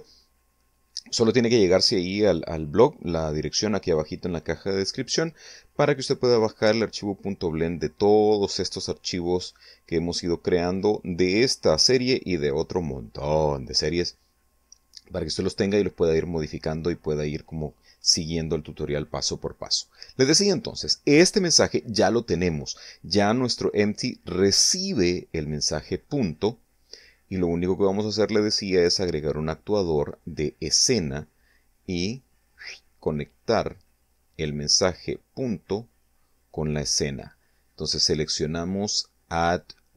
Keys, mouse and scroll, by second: 31.0-33.5 drag, 37.0 click, 39.6 click.